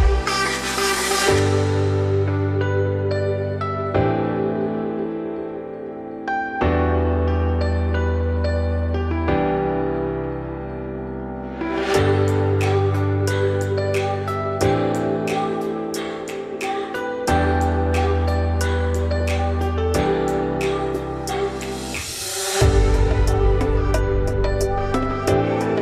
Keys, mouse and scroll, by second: 0.6 Tab, 0.8 middle click, 1.5 z, 2.0 click, 2.6 g, 4.0 click, 4.4 g, 5.3 z, 5.5 scroll down 1, 5.6 middle click, 6.1-7.3 scroll up 5, 7.3 click, 7.6 3, 7.8 click, 8.1 middle click, 8.5 g, 10.8 middle click, 11.1 g, 12.6 middle click, 13.1 i, 17.3 middle click, 18.1-22.1 typing, 19.9-20.3 scroll up 1, 23.7 1, 24.2 click, 24.8 scroll down 1, 25.1 g, 25.7 z.